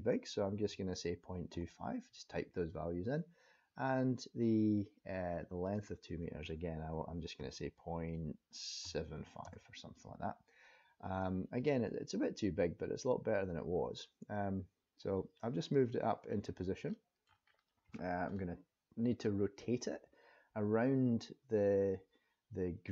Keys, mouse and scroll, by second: 5.7 click, 11.2 click, 16.2-16.7 scroll up 3, 16.9 shift+middle click, 17.4-17.8 scroll up 2, 17.9 shift+middle click.